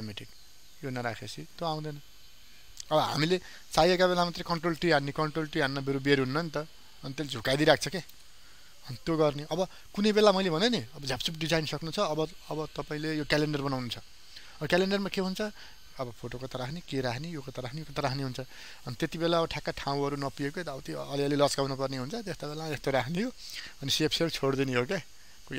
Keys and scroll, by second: 4.4 ctrl+t.